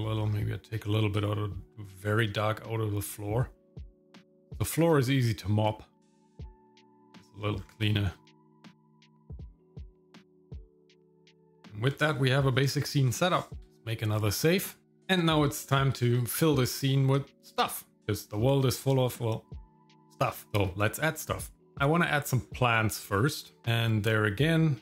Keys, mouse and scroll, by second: 0.3-1.1 scroll up 2, 1.1-6.1 drag, 6.4 click, 7.6-7.9 scroll down 1, 7.9 middle click, 8.4 ctrl+shift+click, 8.6 scroll down 2, 8.7 shift+middle click, 8.9 shift+middle click, 9.4 click, 9.8 scroll down 1, 9.9 shift+middle click, 10.2 shift+middle click, 10.5 KP_0, 10.8 click, 13.6 ctrl+s.